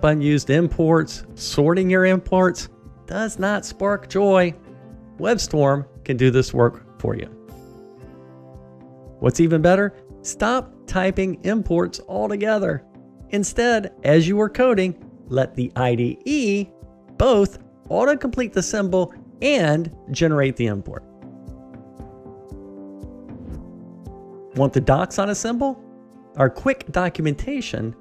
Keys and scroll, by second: 5.8 ctrl+alt+o, 8.4 shift+Return, 14.5 Tab.